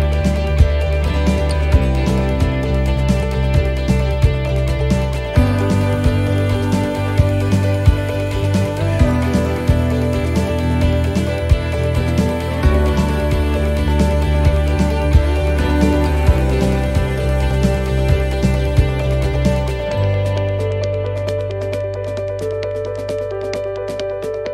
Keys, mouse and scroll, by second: 0.6 click, 3.1 middle click, 3.8 shift+middle click, 4.3-4.6 scroll up 2, 4.6 middle click, 5.2-6.1 scroll down 3, 6.2 click, 8.5 middle click, 10.1 click, 12.8 middle click, 16.8-17.2 scroll up 2, 17.2 middle click, 18.3 click, 20.8 middle click, 22.0 right click, 23.0 l, 23.8 click.